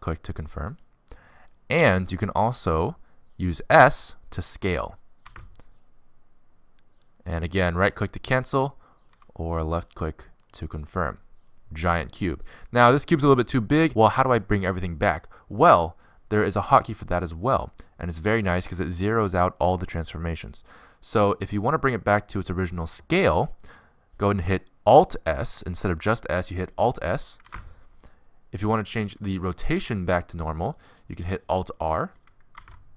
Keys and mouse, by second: 0.5 r, 5.7 s, 8.6 middle click, 9.8 s, 10.6 middle click, 27.9 alt+s, 32.5 alt+r.